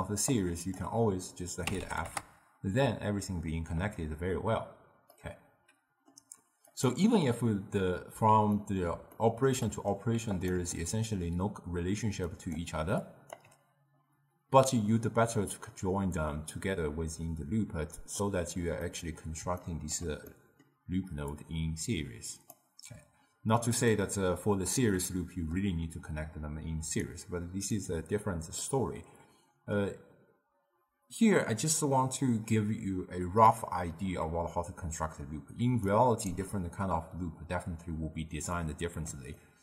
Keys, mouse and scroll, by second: 0.4-1.7 drag, 1.7-2.2 f, 5.2-6.8 middle drag, 6.8 click, 8.2 x, 8.6-10.4 middle drag, 10.4 click, 10.6 Tab, 12.2 d, 12.4 click, 12.7 d, 13.1 click, 13.4 d, 13.5 d, 15.1 d, 18.0 click, 18.9-21.4 middle drag, 21.4-24.0 drag, 24.0-26.9 middle drag, 26.9 d, 27.1 right click, 27.8 d, 27.9 d, 28.7-31.9 middle drag, 35.7 d, 35.9 right click, 36.4 d, 38.6-39.6 middle drag.